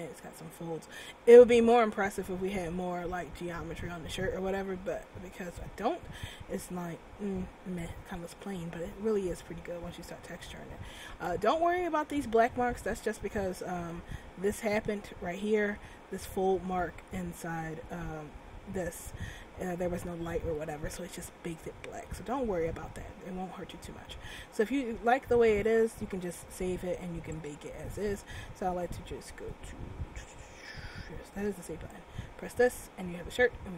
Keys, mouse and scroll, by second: 0.5-1.1 scroll down 1, 2.5 middle click, 3.2-3.8 scroll up 6, 4.8-5.1 scroll down 1, 7.5 scroll down 2, 8.4-8.8 scroll up 1, 13.4 middle click, 15.8 middle click, 19.4 middle click, 21.1-21.7 scroll down 1, 21.7 middle click, 27.4 click.